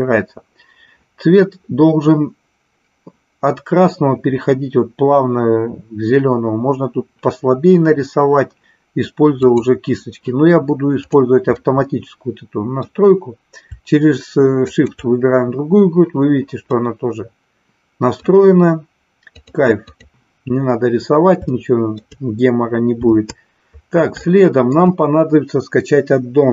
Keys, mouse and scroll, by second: 9.4-11.2 drag, 11.5-12.8 middle drag, 14.7 shift+click, 16.7-18.2 middle drag, 19.3 click, 21.5-21.9 shift+middle drag, 24.3 shift+middle click.